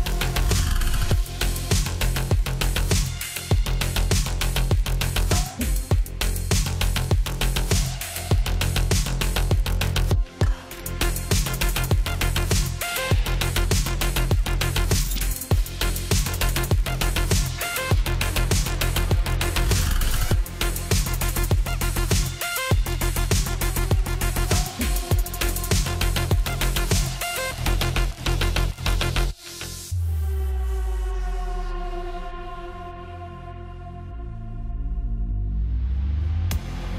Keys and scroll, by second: 0.1 Delete, 18.8-22.0 typing.